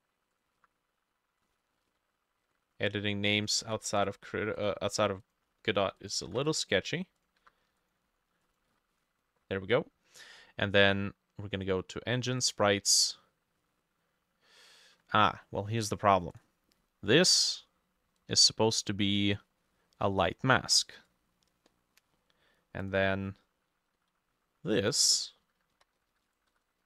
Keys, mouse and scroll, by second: 0.6 F2, 1.9 ctrl+v, 1.9 typing, 2.4 ctrl+z, 3.7 ctrl+v, 3.9 typing, 4.8 F2, 5.5-12.8 ctrl+drag, 5.5 ctrl+middle click, 6.2 ctrl+middle click, 6.3 ctrl+v, 6.4 typing, 7.4 F2, 8.1 ctrl+middle click, 8.7 ctrl+middle click, 8.7 ctrl+v, 9.0 typing, 25.5-26.8 typing.